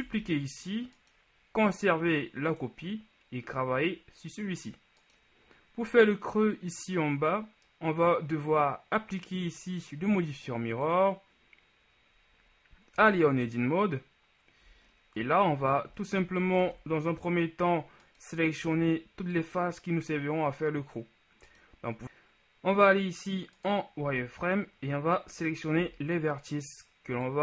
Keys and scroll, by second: 0.2 shift+d, 13.2 Tab, 16.8 ctrl+shift+Tab, 18.8 z, 22.0 ctrl+KP_1, 24.2 z.